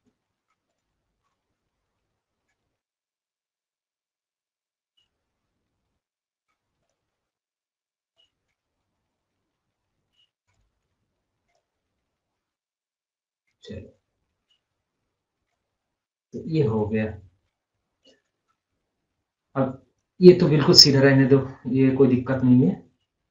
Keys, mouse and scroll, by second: 0.8 click, 1.3 scroll up 1, 1.7 scroll down 1, 6.8 click, 7.4 scroll up 1, 7.7-8.2 scroll down 1, 8.2 scroll up 1, 8.3 scroll down 1, 10.4 click, 13.0 scroll up 1, 13.7 scroll down 1, 13.9 scroll up 1, 15.0 scroll down 1, 15.7 scroll up 1, 18.1 click, 22.4 click, 22.8 scroll up 1, 23.0 scroll down 1.